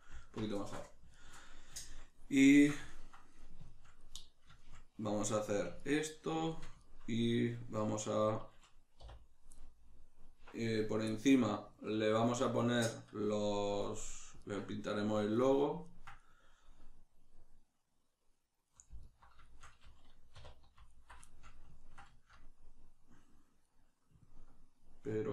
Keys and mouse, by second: 0.2 alt+right click, 0.6-19.0 shift+middle drag, 9.0 3, 19.0 alt+right click, 19.4-20.9 shift+middle drag, 20.4 2, 20.9 alt+right click, 21.2 shift+middle click.